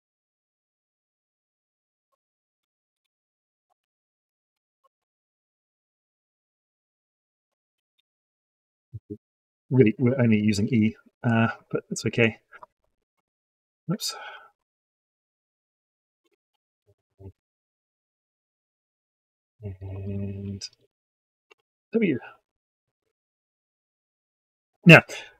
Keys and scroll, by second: 3.5 ctrl+c, 4.9 ctrl+v, 10.5 ctrl+v, 14.1 ctrl+z, 19.9 ctrl+v.